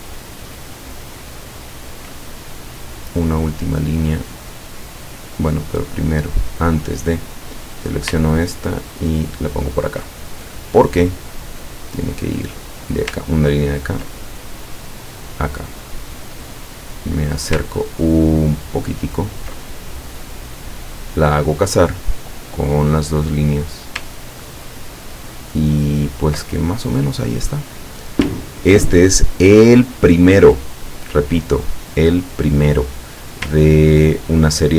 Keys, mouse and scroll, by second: 1.5 ctrl+scroll up 2, 3.8 click, 6.4 click, 7.2 click, 8.3-9.9 ctrl+drag, 11.3 click, 12.9 ctrl+click, 14.6 click, 17.2 click, 17.9-18.5 ctrl+scroll up 2, 18.9 ctrl+middle click, 20.2-21.4 drag, 22.2-24.1 drag, 24.3-24.8 ctrl+scroll down 2, 25.0-25.4 ctrl+scroll down 2, 25.7 ctrl+scroll down 2, 26.5 ctrl+click, 28.6-28.9 ctrl+scroll down 2, 29.8-30.5 ctrl+scroll up 4, 31.3 click, 34.0-34.3 ctrl+scroll down 2.